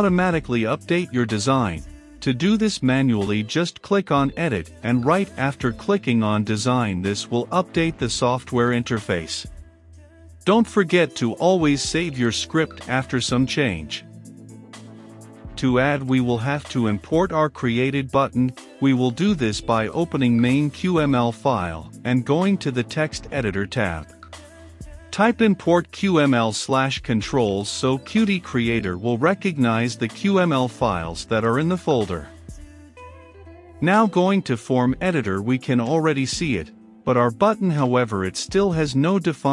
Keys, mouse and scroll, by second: 1.4 right click, 2.0-22.4 drag, 22.4 Return, 22.8-24.9 typing, 23.4 Return, 24.7 Return, 25.7 Return, 26.5-28.5 drag, 28.5 Return, 29.1-31.7 typing, 31.1 Return, 32.0 Return, 33.9-39.5 drag.